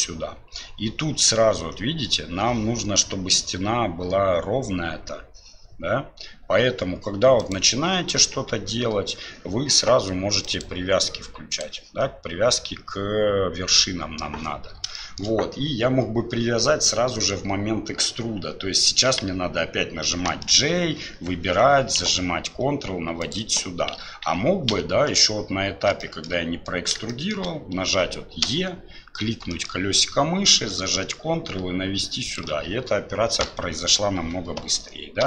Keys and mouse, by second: 10.6-11.9 drag, 15.1 shift+middle click, 24.3 ctrl+z, 26.0 shift+middle click, 27.1 shift+click.